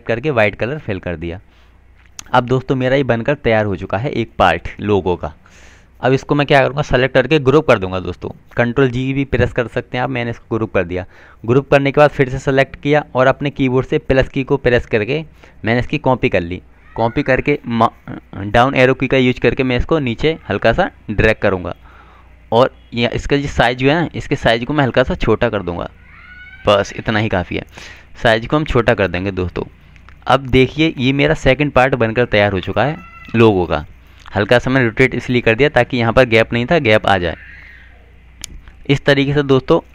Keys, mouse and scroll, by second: 1.1 right click, 1.7 click, 6.8 right click, 10.6 click, 18.7 Down, 22.3 Up, 26.0 click, 32.9 click.